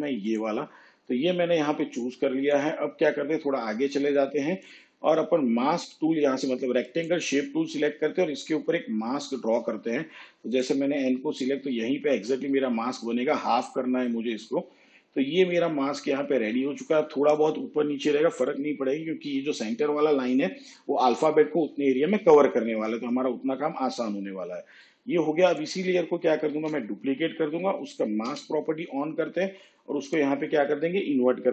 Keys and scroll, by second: 26.5 ctrl+d, 28.3 m.